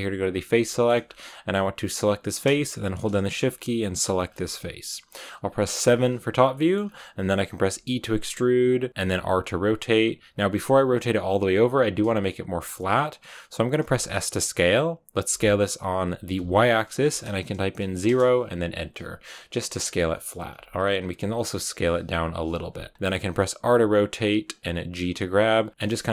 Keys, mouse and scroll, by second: 0.2 click, 0.6 shift+middle click, 0.9-2.0 scroll up 1, 2.0-5.7 right drag, 5.7 KP_7, 6.4 shift+middle click, 6.7-7.6 scroll up 1, 8.9 r, 9.2 g, 10.6 r, 13.7 s, 19.5 middle click, 19.9 scroll down 2, 20.0 middle click, 20.4 s, 21.1 g, 22.1 KP_7, 22.9 scroll up 2, 23.4 r, 24.7-26.1 typing.